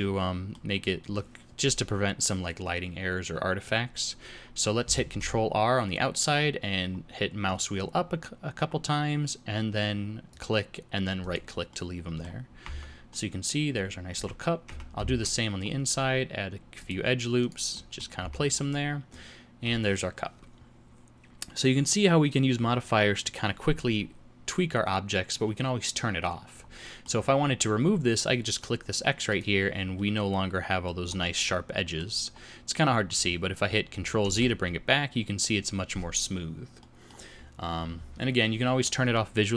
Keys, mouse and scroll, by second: 5.0 ctrl+r, 11.6 middle click, 12.6 Tab, 13.0 middle click, 14.6 Tab, 15.0 ctrl+r, 17.7 middle click, 18.1 Tab, 18.5 middle click, 26.8 middle click, 27.1-27.6 scroll down 1, 27.6-29.2 scroll down 2, 29.2 click, 29.9 middle click, 31.0-32.2 scroll up 4, 31.4 middle click, 32.4-32.9 scroll up 1, 34.2 ctrl+z, 36.7 middle click, 37.3-38.3 scroll down 1, 38.3-39.5 scroll down 3.